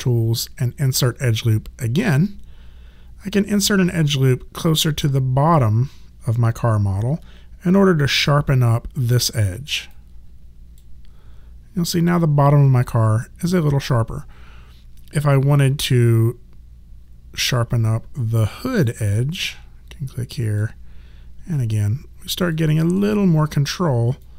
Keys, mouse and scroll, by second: 4.8 alt+click, 9.9 click, 13.8 alt+middle click, 17.9 alt+click, 21.5 alt+click, 23.0 alt+middle click, 24.2 alt+click.